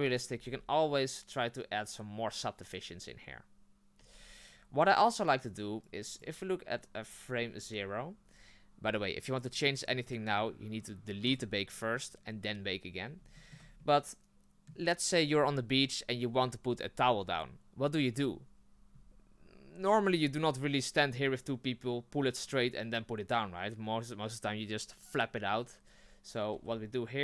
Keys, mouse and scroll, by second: 0.3 Tab, 4.0 Tab, 5.9-12.9 drag, 12.9-13.3 scroll down 1, 13.3-26.5 shift+middle drag, 26.5 r.